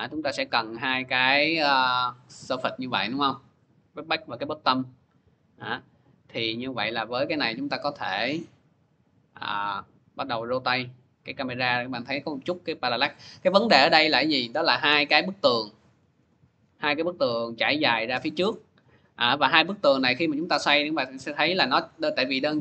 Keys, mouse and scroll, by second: 0.3 click, 4.2 click, 5.4 click, 7.0 c, 14.8 click, 16.0 ctrl+z, 19.0-20.9 drag.